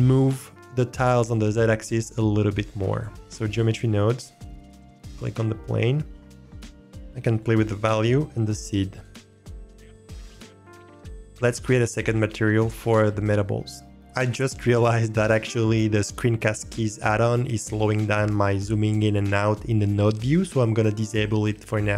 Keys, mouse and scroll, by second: 2.9 click, 7.3 click, 8.9 click, 10.8 click.